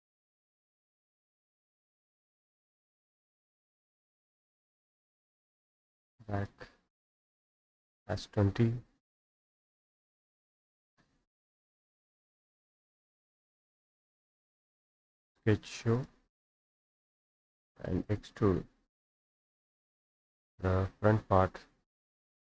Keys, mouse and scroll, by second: 0.0 click, 1.9 click, 4.0 click, 5.2 click, 6.4 click, 9.8 click, 10.4-11.2 typing, 12.2 click, 13.4 Escape, 14.5-15.5 drag, 16.0 click, 16.5 Escape, 18.0 click, 20.1 click, 22.4 click.